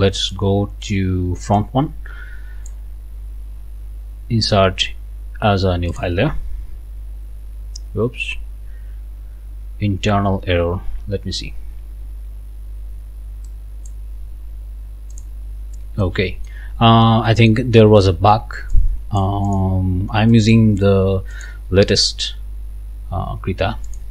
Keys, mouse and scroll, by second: 0.2 click, 0.9 click, 1.5-2.9 drag, 5.9 click, 13.5 click, 15.1 click, 16.0 click, 16.7 scroll down 2, 17.3 right click, 18.7 click, 19.5 click, 20.3 click, 23.9 click.